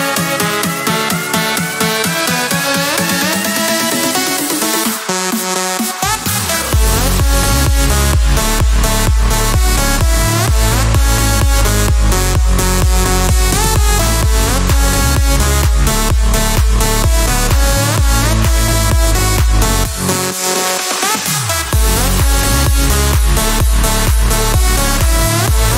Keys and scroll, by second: 8.6 Escape, 9.0-12.2 typing.